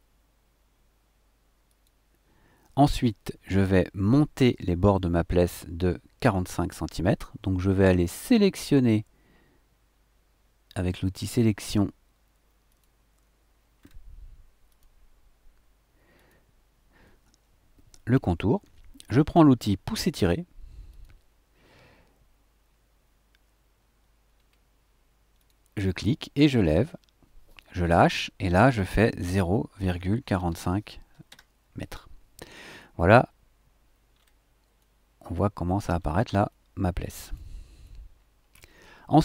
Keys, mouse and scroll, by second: 1.6 click, 8.2-8.5 scroll up 1, 10.9 click, 12.7 click, 13.8 scroll up 2, 14.7 click, 16.1 click, 20.9 click, 24.3-24.7 scroll up 2, 25.3 click, 29.2 KP_0, 29.8 ,, 30.3 KP_4, 30.5 KP_5, 31.3 KP_Enter, 34.1-34.4 scroll down 2, 34.8 click, 35.6-36.2 scroll down 4, 36.5-37.5 drag, 37.8 shift+click, 38.4 shift+middle click.